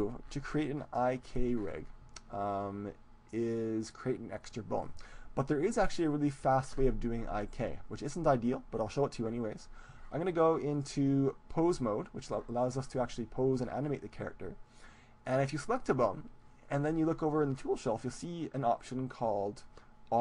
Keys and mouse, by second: 10.7-20.2 drag, 12.8-20.2 right drag.